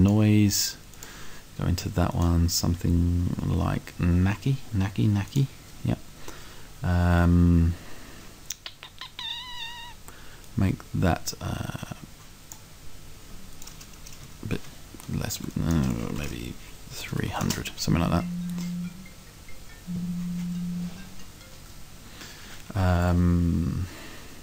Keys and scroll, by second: 14.6 Down, 15.3 Down, 16.9 3.